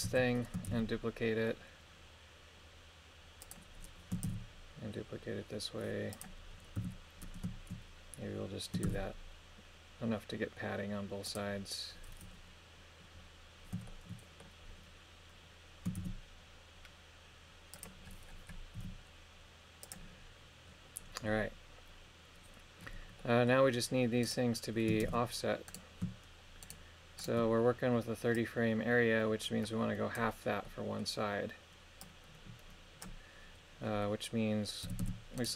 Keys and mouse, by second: 0.1 a, 0.7 shift+d, 3.5 click, 4.3 shift+d, 6.2 click, 6.8 a, 8.9 shift+d, 11.3 click, 13.9 shift+middle click, 16.0 shift+d, 17.8-18.8 drag, 18.8 g, 19.9-21.5 drag, 23.2 middle click, 24.3 right click, 25.1 shift+space, 25.7 right click, 26.6 shift+right click, 27.2 shift+right click, 28.4-30.2 drag, 30.6 middle click, 32.0 click, 34.8 a, 35.0 a, 35.4 right click.